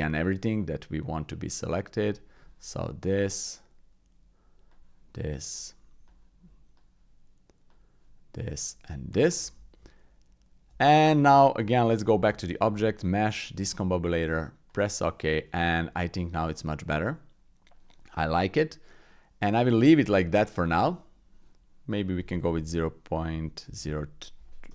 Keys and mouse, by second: 0.4-2.3 drag, 3.2-4.7 shift+drag, 5.7 shift+click, 6.7-7.7 shift+drag, 8.5 shift+click, 9.8 alt+z, 10.8 middle click, 11.6 Tab, 12.2 shift+a, 16.4-17.6 drag, 18.4 click, 19.1 middle click, 20.4 middle click, 22.0-24.7 drag.